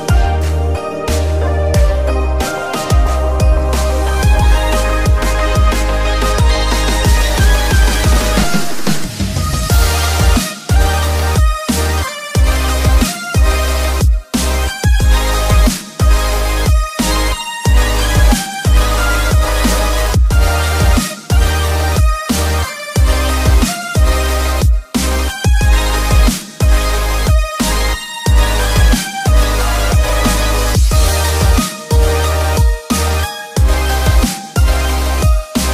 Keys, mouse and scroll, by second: 0.5 s, 3.2 click, 3.7 middle click, 5.3-6.9 drag, 7.5 click, 7.8 alt+click, 8.7 s, 10.5 click, 11.0-15.6 middle drag, 15.9-17.2 scroll up 2, 17.2 Tab, 18.1 click, 18.5-19.0 scroll down 2, 19.4-24.1 middle drag, 27.5 scroll down 2, 28.2-28.6 middle drag, 28.8 KP_7, 29.6-30.3 scroll up 1, 30.3-30.6 scroll up 1, 30.6 shift+a, 34.4-35.7 drag.